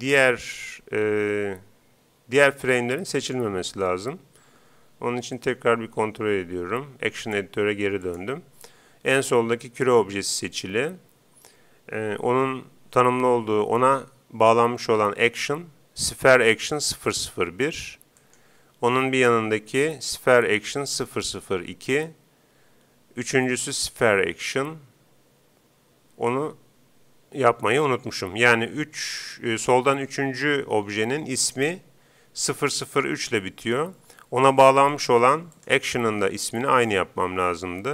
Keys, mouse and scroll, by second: 3.2-4.9 right drag, 5.4-7.1 right drag, 7.2 right click, 7.3-9.0 drag, 18.2-19.9 right drag, 21.9-23.5 right drag, 34.9-36.5 drag.